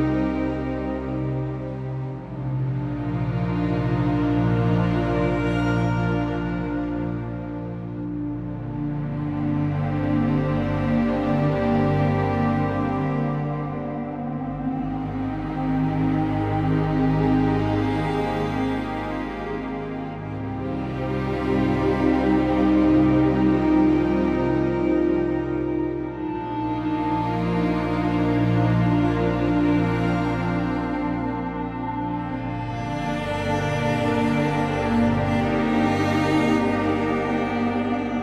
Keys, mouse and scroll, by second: 33.4 z, 35.0-36.7 scroll up 1, 36.7-37.1 scroll up 1, 37.1 click, 38.1-38.2 scroll down 1.